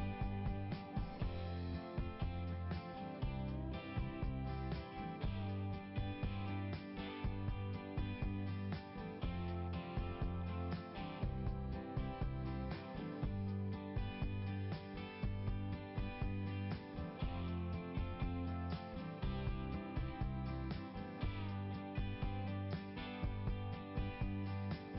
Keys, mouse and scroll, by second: 0.0 click, 0.3 click, 0.6 click, 1.0 click, 1.2 click, 7.0 click, 8.6 click, 9.2 click, 12.2 click, 13.6 click, 16.3 click, 16.9 click, 19.3 click, 21.8 scroll up 1.